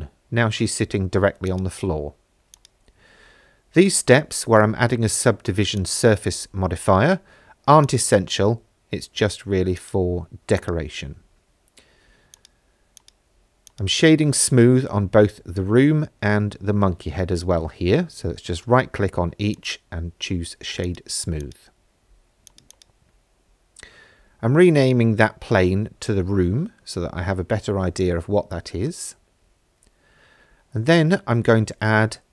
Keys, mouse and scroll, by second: 1.5 click, 2.5-6.0 drag, 7.8 click, 9.8 right click, 12.3 click, 13.0 right click, 14.6 middle click, 15.6-17.3 scroll down 6, 17.4 shift+middle click, 19.5 click, 20.8 click, 21.4 click, 22.5 click, 22.7-25.4 drag, 24.7 o, 28.4 shift+a.